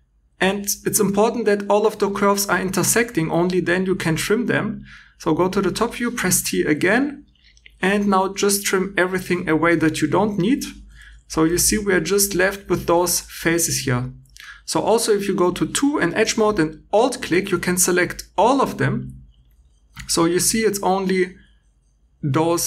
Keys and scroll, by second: 10.9 3, 13.6 Escape, 16.2 2, 17.3 g.